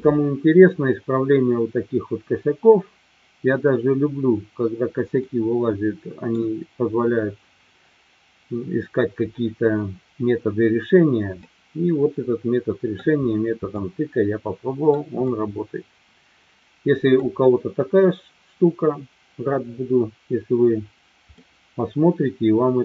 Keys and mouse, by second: 5.4-6.3 middle drag, 11.4-13.0 middle drag, 13.7-14.8 middle drag, 15.4-17.1 middle drag, 21.4-22.8 middle drag.